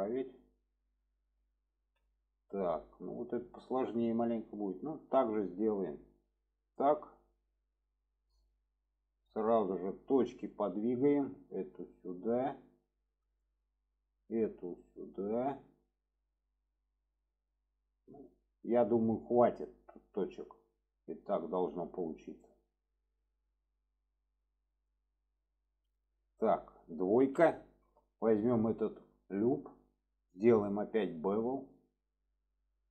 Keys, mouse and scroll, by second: 1.8 alt+z, 4.6 click, 6.8 click, 9.7 shift+middle click, 10.8 click, 11.5-13.4 drag, 13.9 click, 14.6-15.5 drag, 19.9 click, 20.6-21.6 drag, 22.2 click, 22.9 click, 24.4-24.9 drag, 25.3-26.1 drag, 28.1 click, 28.7 shift+middle drag, 30.3 click, 31.3 click, 32.4 click.